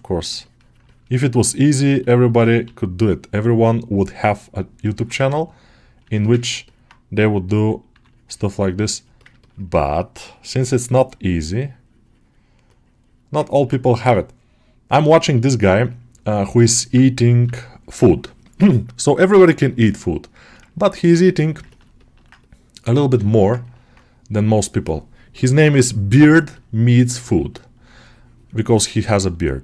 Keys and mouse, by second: 0.7 middle click, 1.0-2.1 middle drag, 2.5 g, 4.9 middle click, 6.3 ctrl+middle click, 6.5 middle click, 8.0-9.1 middle drag, 9.3 middle click, 12.5 middle click, 13.4 ctrl+alt+middle click, 15.7 click, 16.6 middle click, 20.2 shift+middle click, 20.6 ctrl+alt+middle click, 21.1 shift+click, 21.6 alt+shift+middle click, 23.1 alt+shift+middle click, 23.5-27.0 ctrl+alt+middle drag, 27.1 click, 27.7-28.9 drag, 29.2 shift+click, 29.5 shift+click.